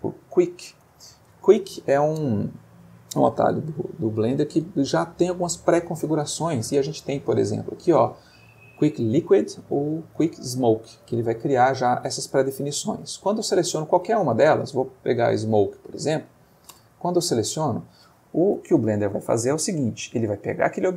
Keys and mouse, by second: 0.0-0.8 typing, 7.2 Down, 10.1 Down, 11.0 Up, 11.3 Down, 11.5 Up, 11.8 Down, 12.0 Up, 12.2 Down, 12.4 Up, 14.4 Down, 16.7 Return, 19.5 middle click, 20.6 click.